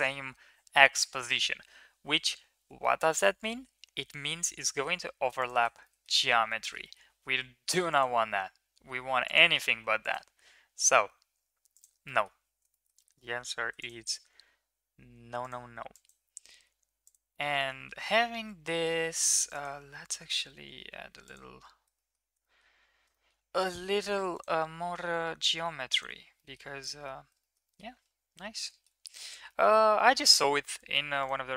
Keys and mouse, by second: 2.9 shift+middle click, 3.3 middle click, 3.8 e, 5.9 middle click, 6.7 shift+middle click, 7.7 ctrl+r, 10.1 ctrl+r, 12.2 middle click, 12.8 shift+middle click, 13.0 middle click, 13.6 ctrl+r, 15.8 ctrl+r, 17.4 middle click, 17.8 Tab, 17.9 Tab, 18.3 Tab, 18.9 Tab, 19.4 ctrl+r, 21.9 shift+middle drag, 22.5 shift+middle click, 23.2 shift+middle click, 24.2 ctrl+r, 26.3 Tab, 26.8 click, 27.4 shift+middle drag, 27.7 middle click, 28.3 middle click, 29.1 ctrl+s, 29.5 middle click.